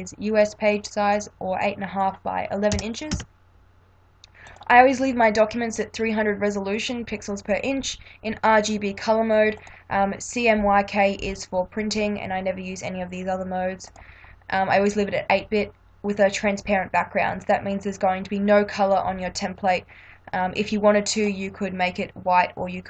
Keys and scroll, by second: 0.0-0.1 typing, 2.7 BackSpace, 3.1 1.